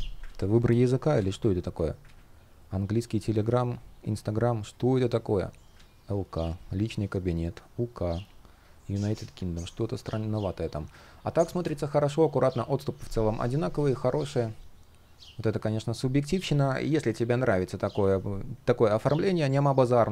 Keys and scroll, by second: 0.8 super+z, 1.7 super+z, 5.4 super+z.